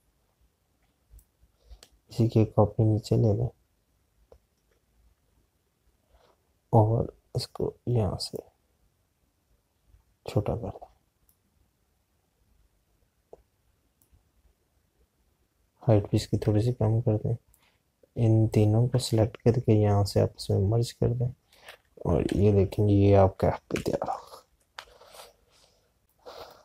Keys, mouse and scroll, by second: 2.0 alt+click, 9.2 click, 18.4 shift+click, 23.2 i, 23.7 click.